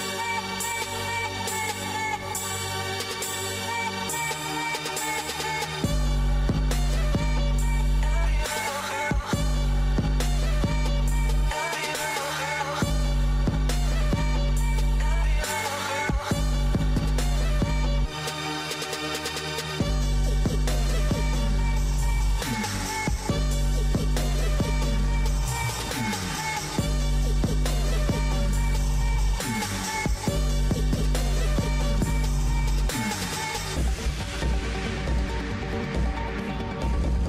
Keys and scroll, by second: 18.3 ctrl+s, 33.5 ctrl+-.